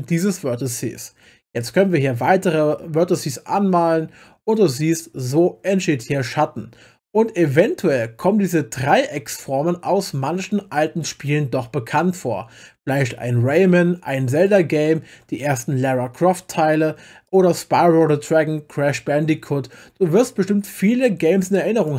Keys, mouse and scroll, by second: 1.6 click, 9.1 click, 14.9 middle click, 17.2 click, 21.5 click.